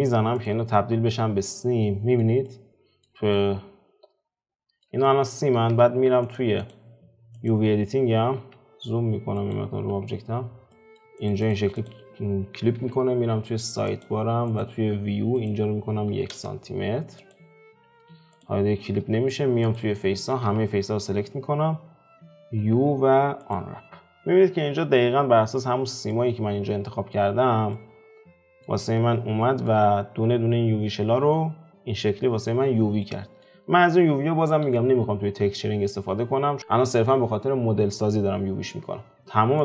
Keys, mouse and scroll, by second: 0.3 click, 0.7-5.7 middle drag, 5.7 Tab, 6.6 click, 7.4 click, 9.5 click, 10.0 `, 10.7 middle click, 11.0 scroll down 2, 11.3 Tab, 11.5 click, 11.8 click, 12.7 n, 16.3-17.3 drag, 17.8 n, 18.4 click, 18.6-19.7 scroll up 2, 19.7 Tab, 20.0 middle click, 20.5 a, 20.7 scroll down 2, 21.4-22.6 scroll down 1, 22.7 u, 26.1-27.3 middle drag, 27.3-27.7 scroll up 2, 27.7-28.9 middle drag, 28.9-29.4 scroll up 2, 29.4-38.9 shift+middle drag, 38.9-39.2 scroll down 3, 39.2 click.